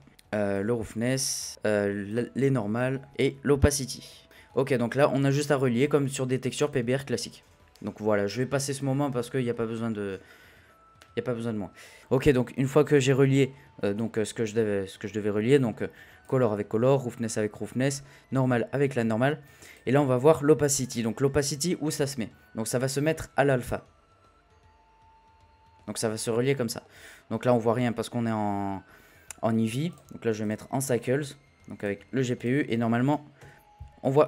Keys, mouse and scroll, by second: 4.2 middle click, 4.5-5.8 scroll up 1, 5.8-8.8 drag, 9.4-11.4 scroll up 3, 11.4-12.0 scroll up 1, 12.0 click, 13.0 click, 15.0-16.2 middle drag, 16.2 click, 20.0-20.5 scroll up 1, 20.5-22.1 scroll up 1, 22.1-23.1 scroll up 1, 23.1 click, 26.4-29.9 middle drag, 29.9 click, 30.4-33.4 drag, 33.4 z.